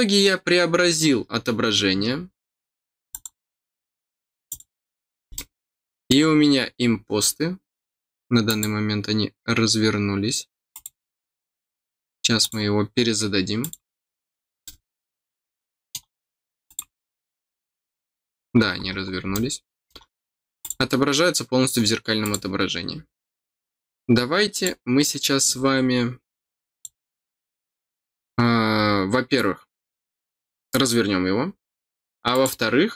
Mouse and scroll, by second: 3.1 click, 4.4 click, 5.3 middle click, 6.8-7.2 scroll up 4, 8.4 click, 10.7 click, 12.4 click, 13.6 click, 14.6-15.9 middle drag, 16.1 middle click, 16.6 click, 17.4-17.9 scroll down 1, 18.5 middle click, 19.0 scroll down 1, 19.3 middle click, 20.6 click, 22.2 click, 24.5 click, 26.7 click, 32.3 click.